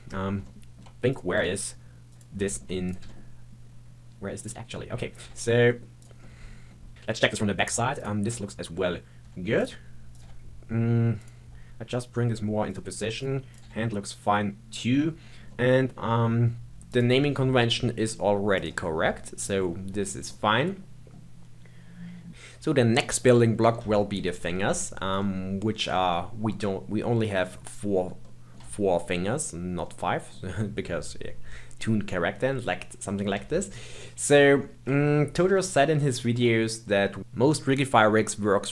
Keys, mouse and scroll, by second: 0.4 shift+middle click, 1.1 click, 1.3 g, 2.4 shift+middle click, 2.8 click, 3.0 g, 5.1 click, 5.2 g, 6.2-6.7 middle drag, 6.7 scroll down 1, 6.9 scroll up 2, 7.1-7.9 scroll down 1, 7.9 click, 8.8-9.2 scroll up 1, 9.2 g, 10.1 click, 10.2 g, 12.6 click, 12.9 g, 13.5 click, 13.6 g, 15.2 scroll down 3, 15.5-16.1 middle drag, 16.1-16.8 scroll up 2, 16.8 click, 18.5 click, 20.2-22.3 middle drag, 22.3-23.2 scroll down 1, 23.2-32.6 middle drag, 32.6-33.5 scroll up 2, 33.5-34.9 shift+middle drag, 34.9-35.5 scroll down 2, 35.5-37.2 shift+middle drag.